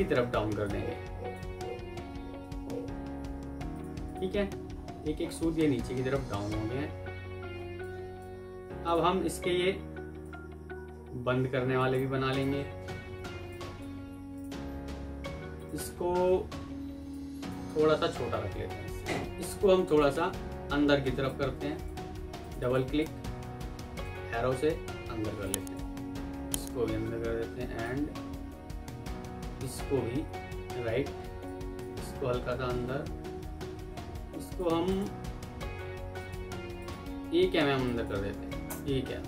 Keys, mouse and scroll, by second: 3.9 double click, 4.7-5.1 alt+scroll down 1, 5.1-5.4 alt+scroll up 1, 5.4 alt+scroll down 1, 8.2 Escape, 11.7 right click, 13.8 Escape, 16.7 ctrl+q, 18.0 Down, 22.5 double click, 24.1 Left, 30.1 Right, 33.6 ctrl+z, 34.8 double click, 38.3 typing, 38.5 Return.